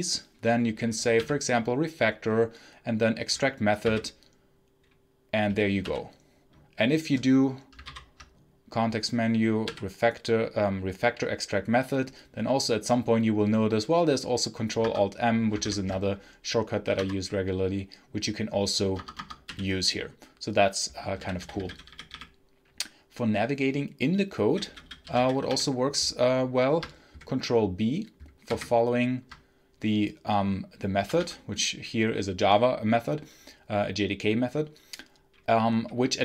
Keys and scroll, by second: 1.0 r, 3.7 m, 5.7 u, 7.7 Menu, 9.5 r, 14.7 Escape, 15.5 ctrl+alt+m, 16.8 i, 16.8 Return, 18.8 Escape, 19.1 Escape, 19.3 u, 20.8-22.5 typing, 24.1-25.8 typing, 28.3 ctrl+b, 30.9 z, 31.2 z.